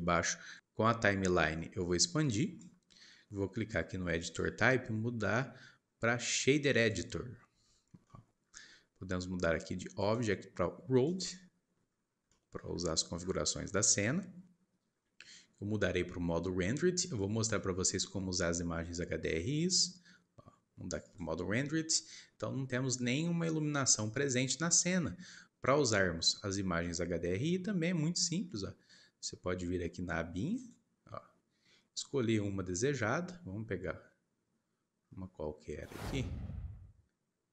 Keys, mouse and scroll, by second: 0.6 click, 4.2-7.5 drag, 7.5-8.0 scroll down 1, 8.0-10.0 shift+middle drag, 10.0-11.9 drag, 11.9-12.2 scroll up 5, 12.2 shift+middle click, 12.7-13.3 scroll up 11, 13.7-16.8 shift+middle drag, 21.5-22.6 drag, 30.6 click, 31.6 click.